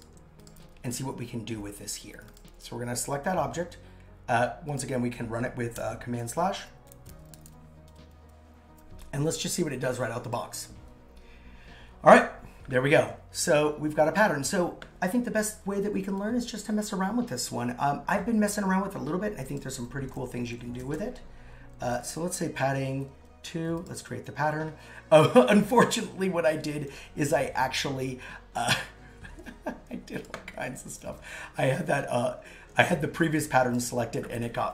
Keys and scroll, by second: 5.8 super+/, 20.4 shift+Down, 29.3 super+z, 30.8 super+z.